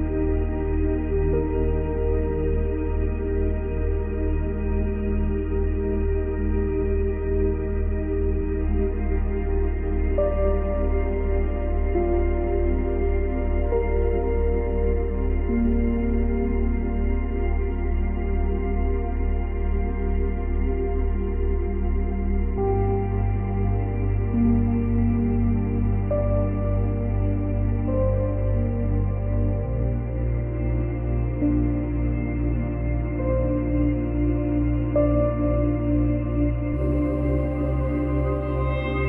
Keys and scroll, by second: 1.9 ctrl+z, 37.8 space.